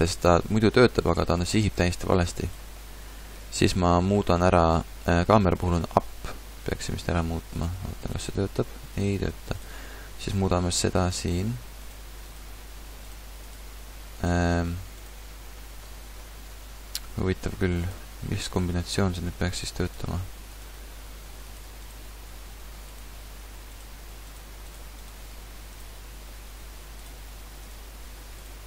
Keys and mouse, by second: 2.8-4.4 drag, 4.4-5.6 middle drag, 5.6-27.6 drag, 27.6-28.6 drag.